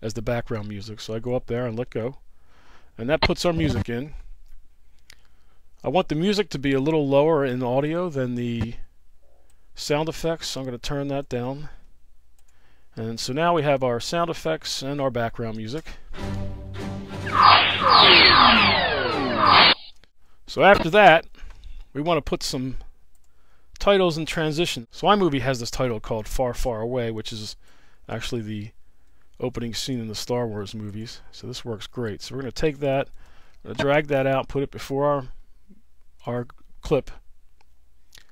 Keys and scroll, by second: 15.7 space, 19.7 space.